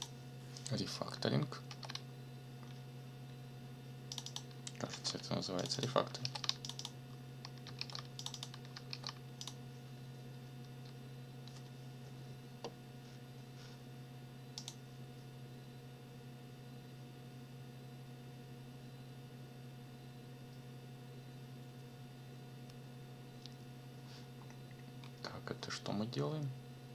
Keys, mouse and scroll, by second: 1.7 ctrl+c, 4.1 click, 4.9 ctrl+c, 5.6 click, 6.2 ctrl+v, 6.6 ctrl+click, 7.8 ctrl+v, 8.2 ctrl+click, 8.9 ctrl+v, 9.4 ctrl+click, 14.6 click, 24.3-25.2 scroll up 4, 25.6-25.9 scroll up 2.